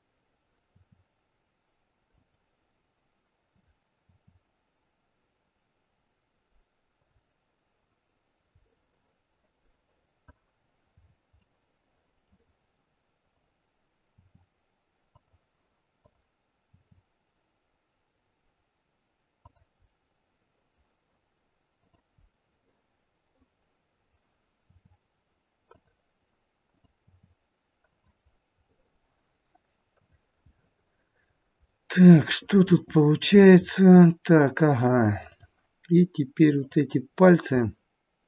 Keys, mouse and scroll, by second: 0.6 r, 3.5 click, 4.1 r, 8.6 middle click, 10.5-12.5 scroll down 5, 11.4 middle click, 13.3 click, 14.1 r, 15.9 click, 16.7 r, 21.7 middle click, 21.7 click, 22.3 middle click, 24.6 r, 26.6 click, 27.1 r, 28.5 middle click, 29.9 click, 30.4 middle click, 31.5 middle click, 32.8 middle click, 35.2 click, 36.5 click, 37.5 middle click.